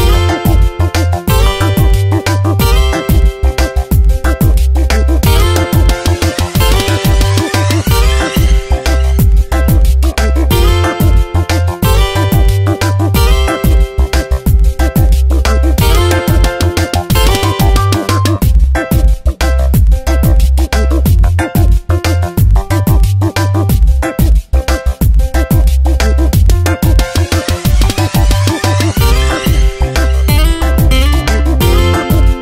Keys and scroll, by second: 1.8 ctrl+z, 3.8 space, 5.4 space, 7.6 F9, 10.4 space, 14.2 space, 17.7 space, 26.2 ctrl+Return, 26.7 Tab, 28.0 v, 32.3 Tab.